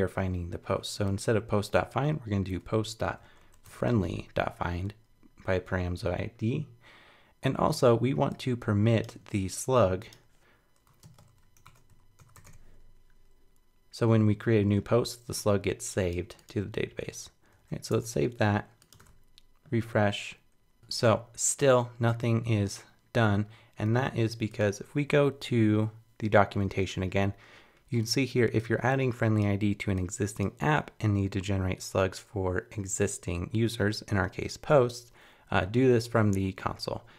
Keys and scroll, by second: 17.5 super+s, 17.9 super+Tab, 19.0 super+r.